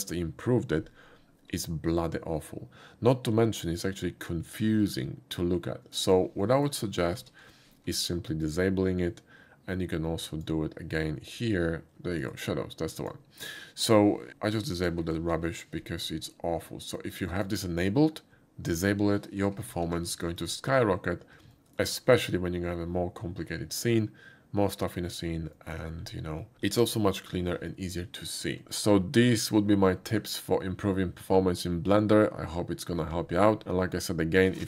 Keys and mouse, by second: 3.7-6.0 middle drag, 6.4 middle click, 7.2 alt+v, 8.5 click, 10.4 click, 11.9 typing, 12.2 click, 13.0 click, 14.3 super+v, 15.2 alt+v, 17.4 click, 19.9 alt+v, 20.4 click, 21.6 shift+middle click, 25.6 shift+middle click, 26.4 shift+middle click.